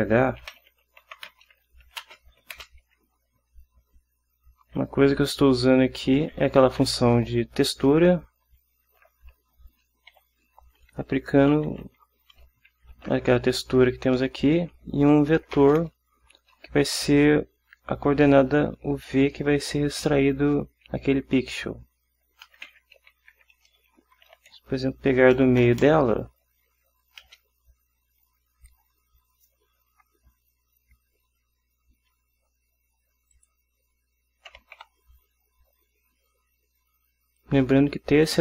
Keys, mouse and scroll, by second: 0.5-2.7 typing, 6.8 t, 7.0 e, 7.3 x, 8.7 shift+9, 9.0 shift+0, 10.3-12.9 typing, 13.7 Up, 14.5 Down, 15.5 ,, 15.8 space, 22.6-27.4 typing, 33.5 click, 34.7 ., 34.9 y.